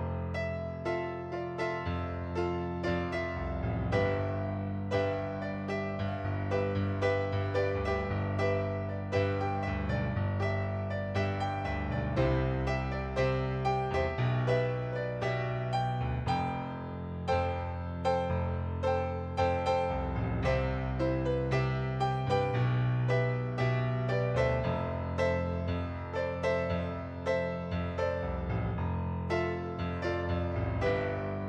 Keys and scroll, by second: 10.0-12.1 typing, 13.8-16.0 typing.